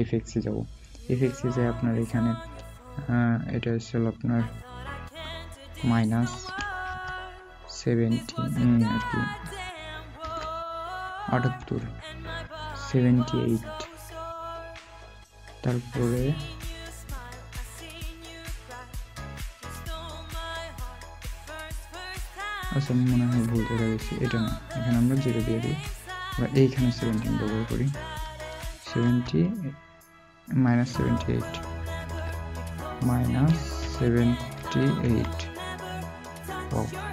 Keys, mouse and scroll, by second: 0.7 typing, 6.8 typing, 21.3 typing, 25.4 typing.